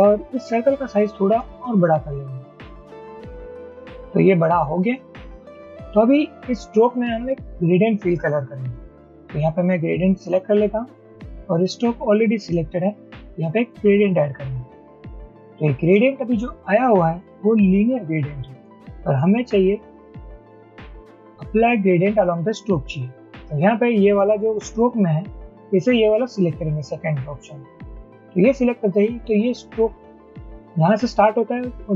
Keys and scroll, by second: 1.8 shift+Up, 2.2 shift+Up, 2.6 shift+Up, 2.8 shift+Up, 3.0 shift+Down, 3.8 shift+Down.